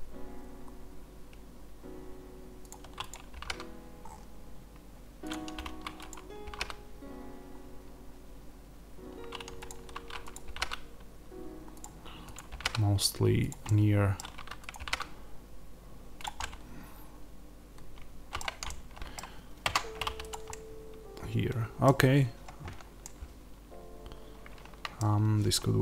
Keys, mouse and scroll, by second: 2.5 click, 3.2 g, 5.2 click, 6.3 g, 9.6 click, 10.4 g, 12.2 click, 12.4 g, 13.4 click, 13.5-14.6 middle drag, 14.6 click, 14.7 g, 16.1 click, 16.3-20.2 middle drag, 19.5 Tab, 20.2 click, 20.4-25.8 middle drag, 21.8-22.9 scroll down 2, 24.9-25.8 scroll down 2.